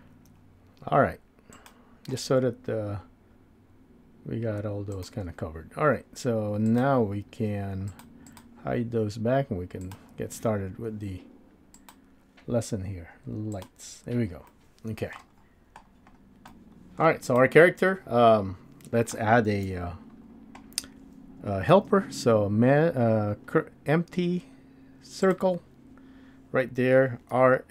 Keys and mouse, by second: 0.5 KP_7, 0.5 g, 4.9 click, 6.6-8.0 drag, 8.3-10.1 drag, 11.9-14.2 drag, 14.9 middle click, 17.1-17.5 middle drag, 19.6 KP_1, 21.7 shift+a, 27.3 r.